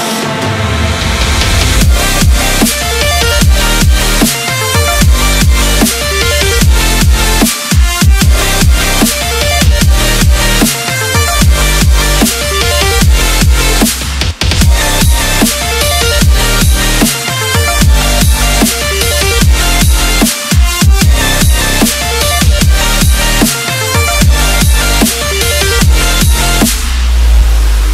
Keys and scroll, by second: 7.8 ctrl+j, 15.1 KP_Subtract, 15.5 KP_3, 15.7 KP_6, 20.5 KP_3, 21.6 KP_8, 24.2 KP_Subtract, 24.5 KP_2, 24.6 KP_2, 26.2 KP_Subtract.